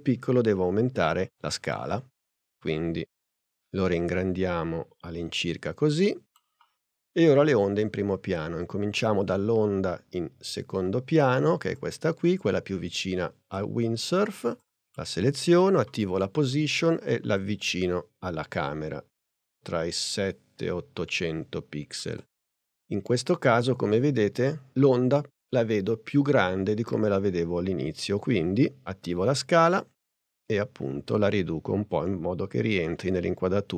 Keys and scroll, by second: 1.3 s, 15.6 p, 28.2 s.